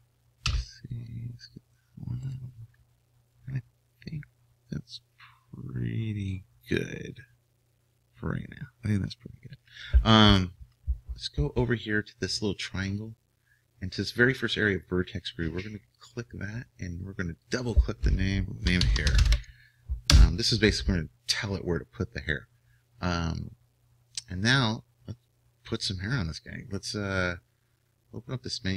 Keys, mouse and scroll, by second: 0.5 c, 3.4 right click, 16.1-20.1 drag.